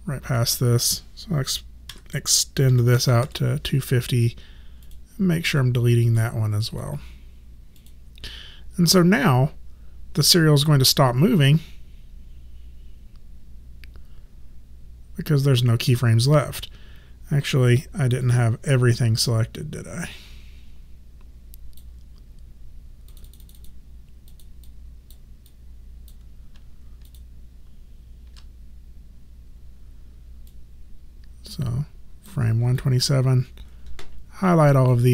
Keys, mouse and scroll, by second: 0.4 click, 1.9 KP_2, 2.7 KP_5, 3.0 KP_0, 3.2 Return, 3.2 KP_Enter, 4.9 click, 6.7 right click, 7.8 click, 18.2 click, 23.1 click, 27.1 shift+click, 30.5 click, 32.8 shift+click.